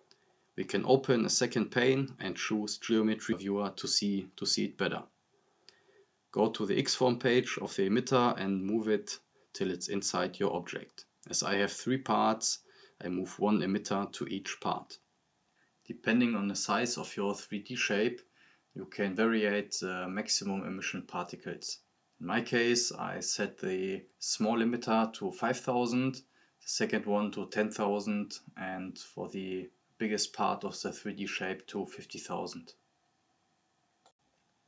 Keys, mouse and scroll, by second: 5.1 scroll down 1, 5.4-9.0 drag, 22.9-23.4 drag, 29.6-32.3 drag.